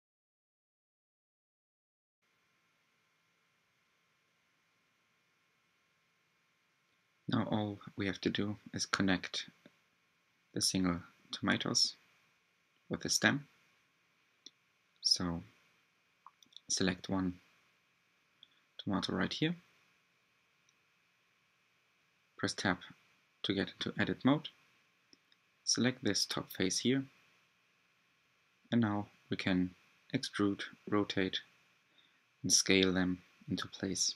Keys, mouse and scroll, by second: 0.1-3.4 middle drag, 3.4-5.7 drag, 10.4-12.6 drag, 13.9 Tab, 14.3 middle click, 15.1 Tab, 15.6-19.6 middle drag, 17.4-17.7 scroll down 1, 19.6 click, 20.2 Tab, 20.7 middle click, 20.7-21.3 scroll up 4, 21.3-21.6 scroll down 3, 23.0 click, 23.8-24.2 scroll up 4, 24.3-25.4 shift+middle drag, 25.4-26.3 scroll up 5, 26.3 3, 27.5 e.